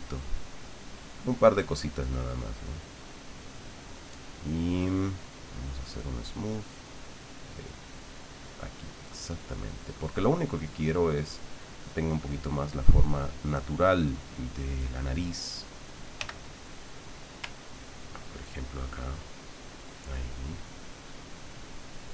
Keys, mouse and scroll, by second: 0.6 click, 1.1 click, 1.6 click, 3.1 click, 4.1 click, 5.4 click, 7.2-9.4 drag, 9.8 click, 10.6 middle click, 11.5-13.0 middle drag, 13.5 click, 14.8 click, 16.1 f, 17.1 click, 18.1-20.2 ctrl+drag, 20.9-22.1 ctrl+drag.